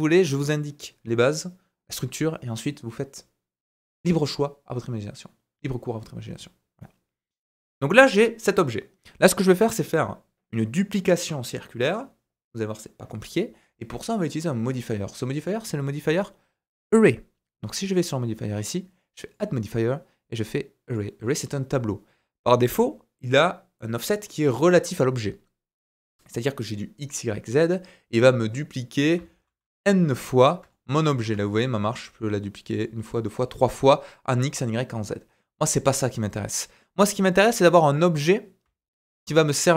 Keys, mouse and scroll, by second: 18.0-19.3 middle drag, 20.9-37.9 drag, 29.1 z, 30.1-30.6 scroll down 1, 30.7 shift+middle click, 31.0 scroll up 1, 31.3 shift+middle click, 31.6-32.7 scroll up 1, 33.1-33.4 scroll down 1, 33.4-36.0 scroll up 1, 37.9-39.7 middle drag, 38.6 z.